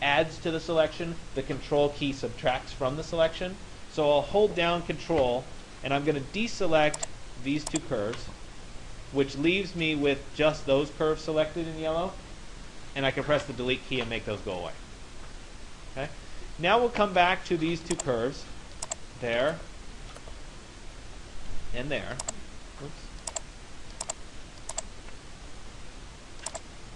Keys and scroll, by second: 12.9 Delete.